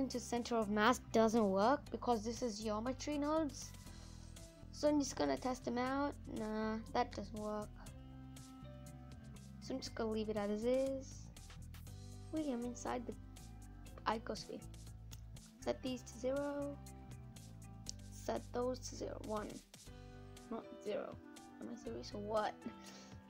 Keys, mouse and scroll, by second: 2.2 shift+s, 2.6-6.1 middle drag, 6.1-8.4 right drag, 8.4 shift+s, 8.8 scroll down 1, 9.0-10.1 middle drag, 10.1-11.1 scroll up 8, 11.1 middle click, 11.7-12.4 scroll down 8, 12.4-15.6 middle drag, 15.6-19.4 drag, 19.4 scroll up 1, 19.6 middle click, 20.3 scroll up 3, 20.6 middle click, 20.9-22.7 scroll down 3, 21.2 middle click.